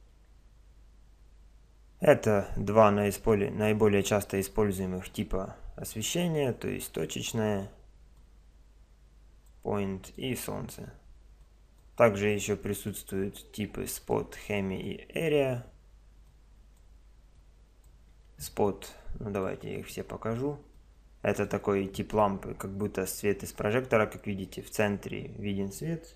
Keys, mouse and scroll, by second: 0.0 Escape, 3.2 click, 5.9-20.2 drag.